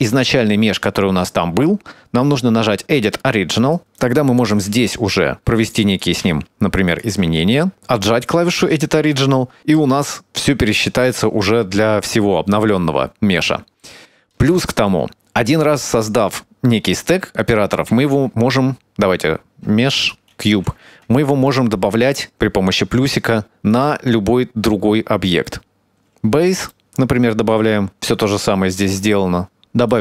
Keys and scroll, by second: 6.2 i, 6.9 e, 7.7 a, 18.3 shift+a, 20.5 g, 26.7 Tab, 27.9 Tab.